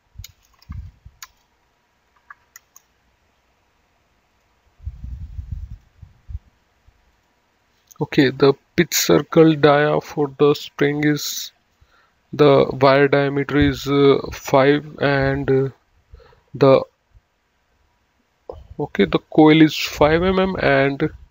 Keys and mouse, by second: 0.0-3.3 typing, 4.4 right click, 5.9 click, 7.4 click.